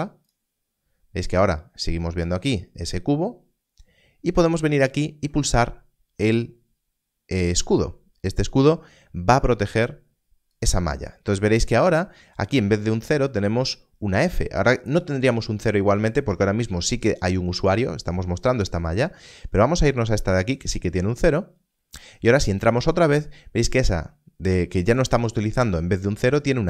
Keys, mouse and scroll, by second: 8.5 click, 21.2 click.